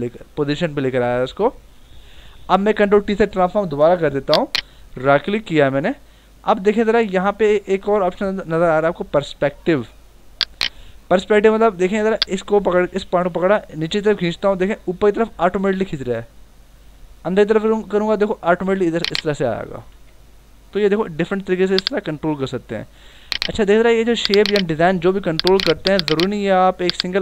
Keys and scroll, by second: 1.9 ctrl+t, 19.8 Return.